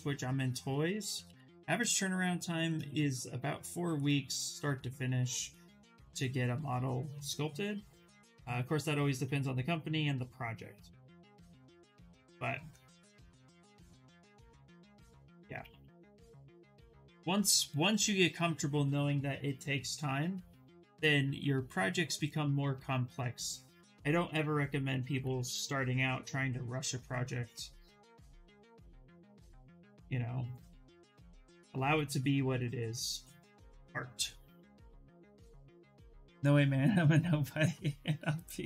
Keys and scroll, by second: 0.5 ctrl+z, 0.7 ctrl+z, 0.9 ctrl+z, 1.1 ctrl+z, 1.6 shift+f, 3.1 s, 11.8 ctrl+z, 12.0 ctrl+z, 13.8 ctrl+z, 15.2 ctrl+z, 21.1 s, 25.3 ctrl+z.